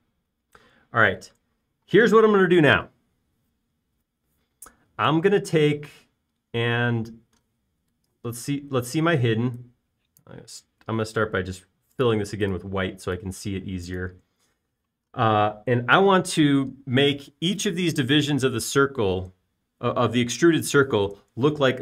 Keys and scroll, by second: 15.2 space.